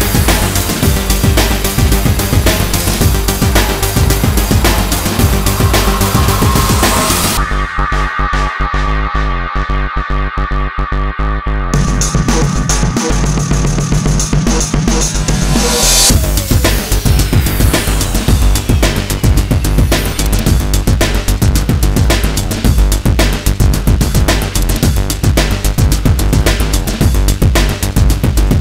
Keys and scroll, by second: 1.2 g, 2.9 x, 3.4 y, 7.8 i, 15.6 1, 15.9 0, 17.1 Return.